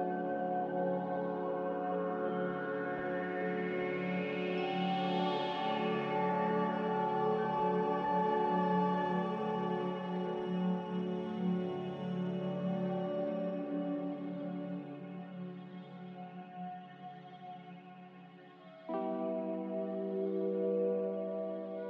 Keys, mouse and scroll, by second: 8.0 b, 10.5-11.4 typing, 19.1 z.